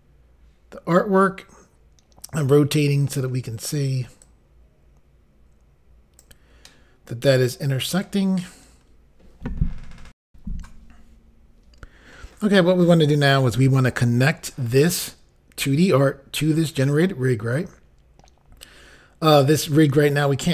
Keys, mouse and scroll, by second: 4.3 click, 6.7 middle click, 10.2 Insert.